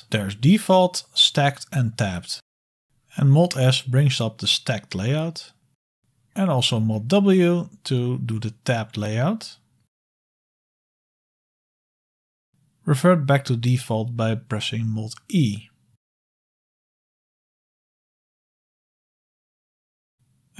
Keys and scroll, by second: 1.7 ctrl+d, 2.9 ctrl+d, 2.9 ctrl+c, 2.9 BackSpace, 3.3 super+s, 5.4-6.1 typing, 6.3 super+Up, 8.6 super+s, 8.6 super+w, 16.1 super+e, 18.1 super+e.